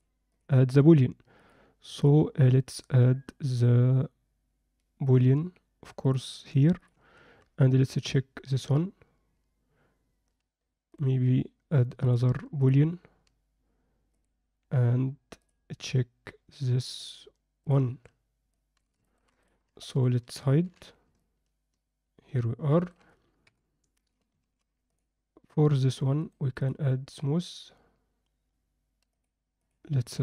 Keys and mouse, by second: 0.3 click, 1.3 click, 1.9-5.1 drag, 6.0-6.9 drag, 7.9 click, 14.1-15.8 drag, 17.0 click, 18.5 alt+middle click, 19.0 ctrl+alt+middle click, 20.6 h, 21.2-22.9 alt+middle drag, 23.5 KP_7, 26.3-27.2 right drag, 29.2 drag, 29.7 click.